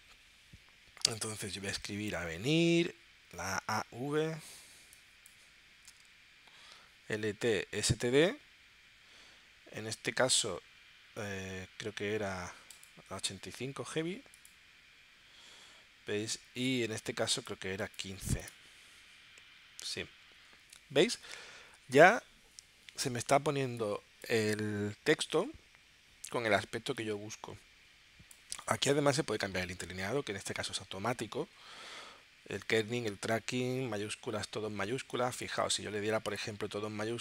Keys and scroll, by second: 1.5 a, 3.3 a, 3.6 v, 5.7 a, 6.0 e.